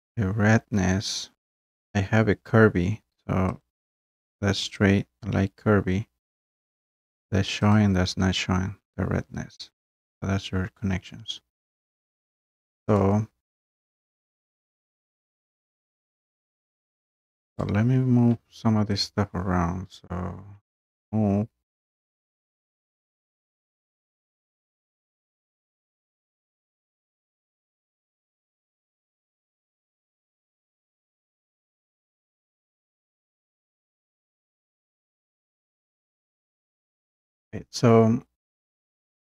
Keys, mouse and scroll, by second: 0.2-0.7 scroll down 1, 1.2-1.7 scroll up 1, 1.8-2.7 scroll, 4.1 click, 4.8 click, 6.9 click, 7.7 click, 9.9-10.4 scroll down 1, 10.6 scroll down 1, 11.0 scroll, 13.0 click, 14.2 click, 17.6 click, 19.1 click, 20.7 m, 22.4 r, 23.1 click, 24.7-25.7 typing, 24.8 click, 25.8 click, 26.6 scroll down 1, 26.8 scroll up 1, 26.8 scroll down 1, 26.9-29.2 typing, 27.0 click, 27.3 click, 27.3 click, 27.8-28.1 scroll up 2, 29.6 click, 29.7 scroll up 3, 29.9 scroll down 2, 30.1-30.4 scroll, 30.8 click, 32.1 click, 32.2-37.5 typing, 32.4 click, 32.7 click, 32.9 click, 33.0 click, 33.8 click, 33.9 click, 34.3 scroll, 34.7 scroll up 3, 35.1 click, 35.5 scroll, 35.7 click, 36.4 click, 36.5 click, 37.2 click, 37.2 click, 38.5-39.2 scroll.